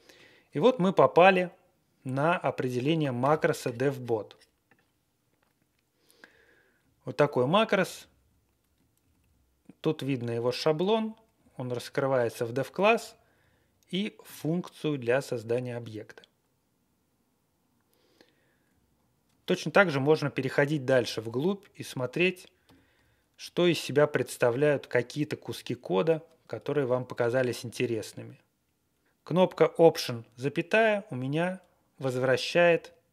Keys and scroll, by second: 2.2 Right, 6.3 Right, 6.5 Right, 6.5 Right, 6.6 Right, 6.6 Right, 6.6 Right, 6.7 Right, 7.3 Down, 7.6 Left, 7.8 Left, 7.9 Left, 8.1 Left, 8.6 Up, 9.0 Left, 9.2-24.9 Left, 10.9 Right, 11.4 Down, 11.7 Right, 12.6 Down, 12.8 Down, 12.9 Down, 13.3 Right, 18.6-19.1 Right, 19.2 Right, 22.6 alt+,, 23.4-23.8 Right, 24.5 shift+Tab, 25.7 Down, 26.8 ctrl+l, 29.0 alt+,, 32.7 alt+,.